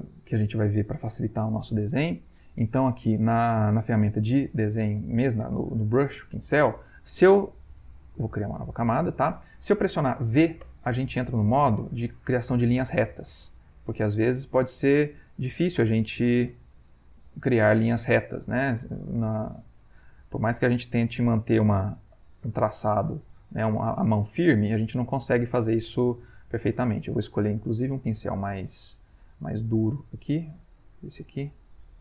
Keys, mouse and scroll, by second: 2.9 click, 8.3 click, 10.7 v, 11.7-13.3 drag, 14.7 ctrl+z, 16.1 click, 18.7 click, 20.1 ctrl+z, 20.5 click, 21.4 ctrl+z, 22.6 click, 25.2 ctrl+z, 26.8 right click, 30.7 click, 31.6 click.